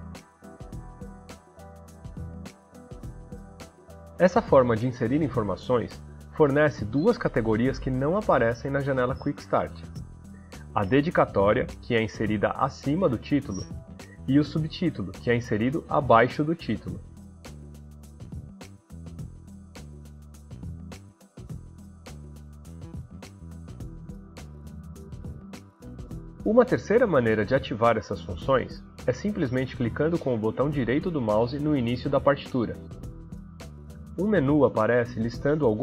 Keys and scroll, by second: 0.0-1.7 typing, 19.9-23.3 typing.